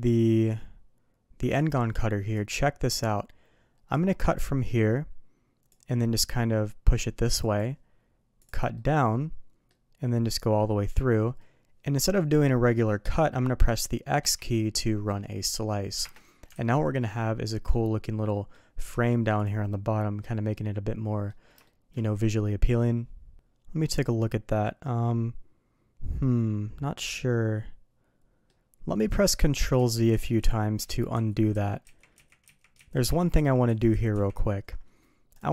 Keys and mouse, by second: 2.3 click, 4.0-5.7 drag, 8.8-16.9 middle drag, 16.5 alt+a, 17.0-17.7 middle drag, 18.3 middle drag, 19.4 click, 20.2-21.3 middle drag, 21.6 shift+middle drag, 23.3-28.5 middle drag, 28.9 middle click, 29.4 ctrl+z, 34.6 ctrl+z, 35.3 click.